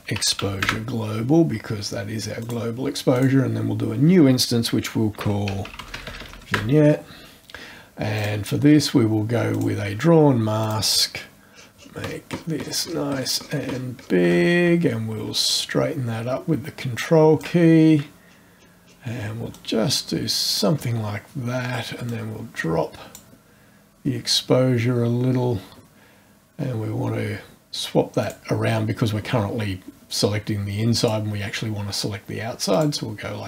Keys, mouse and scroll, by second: 0.0-0.9 typing, 2.4 click, 3.1 click, 4.9-6.8 typing, 8.1 click, 9.5 click, 10.6 click, 11.5 scroll down 2, 11.7-12.3 shift+scroll up 2, 13.4 shift+scroll up 2, 15.4-17.6 ctrl+drag, 17.7-19.1 ctrl+scroll up 2, 19.2 scroll up 1, 19.5-20.8 drag, 22.0 click, 28.2 click, 31.0 click, 32.7 click.